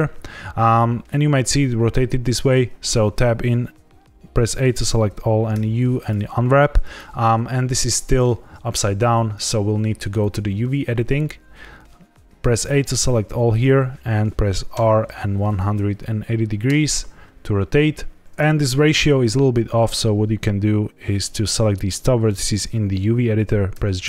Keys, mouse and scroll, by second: 2.8 Tab, 4.5 a, 5.5 u.